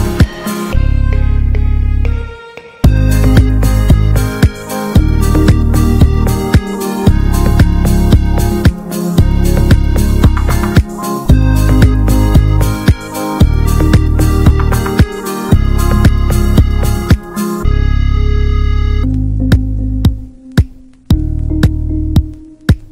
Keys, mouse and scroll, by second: 2.3 click, 2.4 l, 3.1 click, 4.8 click, 8.1 a, 8.3 scroll down 2, 8.5-9.8 shift+middle drag, 9.8 click, 10.2 click, 10.4 l, 13.7 drag, 14.7 Tab, 15.0 click, 15.1 click, 15.6 ctrl+a, 16.6 click, 17.5-17.9 middle drag, 17.9 Tab, 18.0 middle click, 18.4 Tab, 18.4 click, 18.7 click, 19.0 ctrl+a, 19.2-21.3 middle drag, 21.3 click, 21.7-22.5 middle drag, 22.5 click.